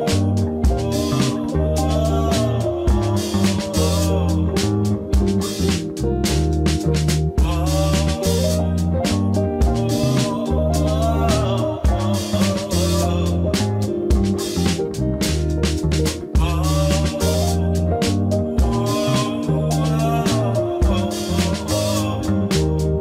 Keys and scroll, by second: 1.5 e, 3.9 e, 5.2-10.3 typing, 17.4 Tab, 20.7 s, 22.7-23.0 typing.